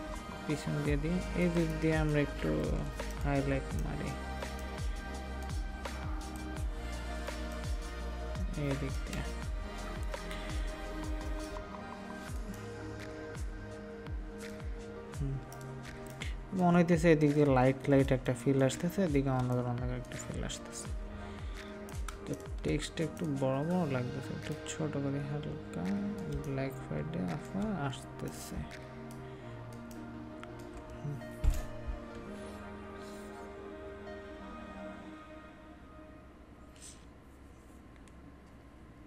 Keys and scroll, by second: 15.9 ctrl+space, 28.5 ctrl+space.